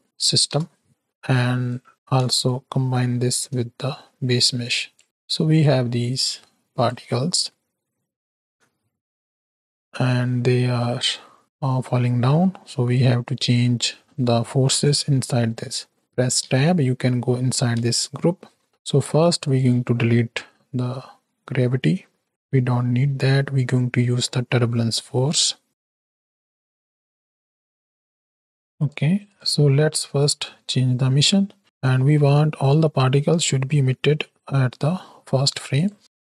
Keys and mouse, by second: 1.0 click, 1.7 click, 2.4-3.6 ctrl+shift+drag, 4.3 click, 5.0 click, 6.0 click, 7.2 middle click, 8.4 space, 10.8 space, 11.3-12.2 drag, 12.9 click, 16.4 Tab, 17.8 ctrl+space, 18.5 click, 19.4 click, 21.2 ctrl+x, 21.7 click, 22.3 shift+a, 28.4 click, 28.6 ctrl+z, 28.7 click, 29.2 click, 31.6 shift+Right, 31.6 shift+Left, 34.4 click, 35.7 click.